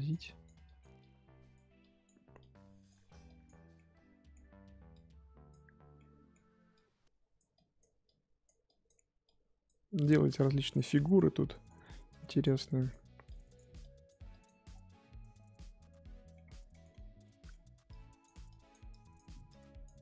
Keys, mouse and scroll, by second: 3.7-4.9 middle drag, 4.9-6.0 drag, 6.0 middle click, 6.7-10.7 drag, 10.7-12.1 middle drag, 12.1-14.6 drag, 14.6 scroll down 3, 14.9-16.4 middle drag, 16.4 scroll up 3, 16.7-17.8 shift+middle drag, 17.8-20.0 drag.